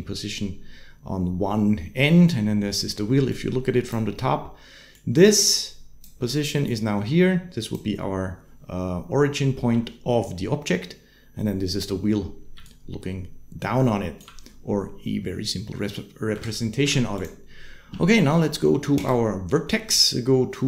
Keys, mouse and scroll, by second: 2.1 click, 3.1-3.7 drag, 4.7-5.9 drag, 6.5-7.6 drag, 12.4 d, 12.4-14.1 drag, 14.1 d, 16.2 Tab, 16.6 Tab, 18.8 click.